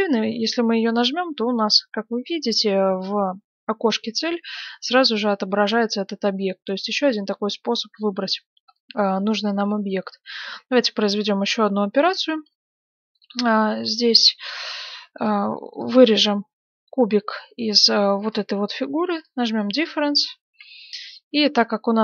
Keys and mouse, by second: 0.7-7.8 drag, 7.8-11.0 middle drag, 11.0-13.7 right drag, 13.7-19.2 middle drag, 19.2-22.0 drag, 20.7 g.